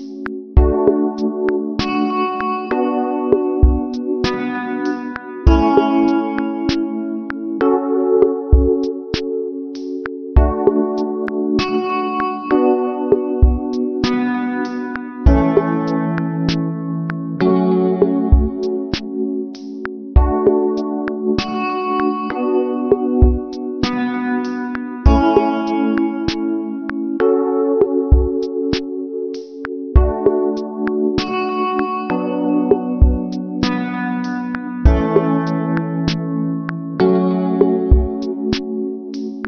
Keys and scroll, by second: 5.0 ctrl+-, 8.7 ctrl+=, 29.5 ctrl+alt+shift+n, 34.2 ctrl+alt+shift+n.